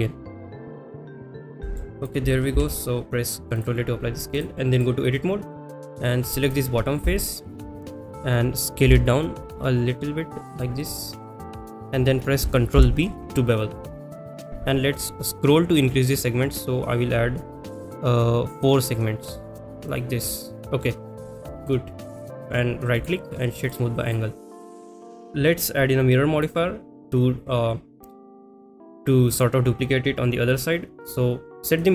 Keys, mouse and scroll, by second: 0.7 click, 0.7 g, 0.7 z, 1.6 middle drag, 2.0 click, 3.6 ctrl+a, 4.3-4.8 drag, 5.7 middle click, 6.4 click, 7.1 shift+middle click, 7.5 middle click, 8.8 s, 10.5 click, 10.8 middle click, 20.2-20.8 middle drag, 21.6 click, 22.4 middle click, 23.7 right click, 24.4 middle click, 25.1 ctrl+a, 26.4 click.